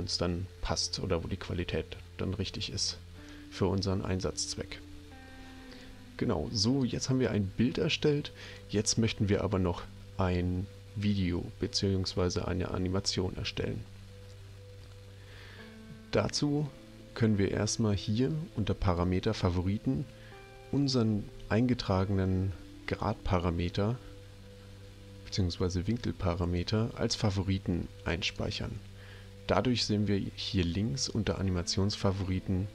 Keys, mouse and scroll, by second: 6.7 click, 8.4 click, 18.8 click, 26.4 click, 28.2 click, 31.2 click.